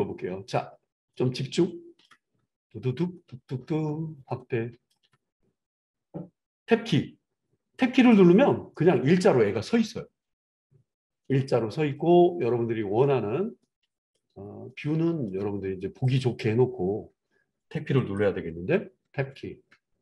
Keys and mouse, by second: 6.7 Tab, 7.9 click, 8.1-16.3 middle drag, 16.0 click, 17.9 click, 19.1 Tab, 19.9-20.0 shift+middle drag.